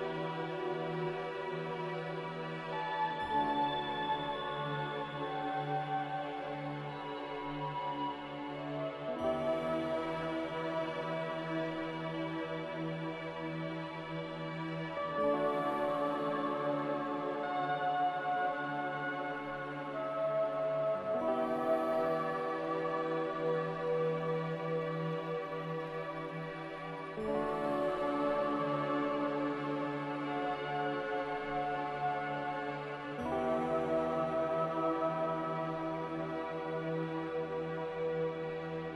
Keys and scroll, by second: 0.7 q, 2.7-3.7 typing, 17.5-18.4 typing, 21.7 ctrl+z, 22.9-23.7 typing, 24.2 ctrl+z, 25.5-26.2 typing, 28.1-28.9 typing, 31.6-32.4 typing, 36.0 z.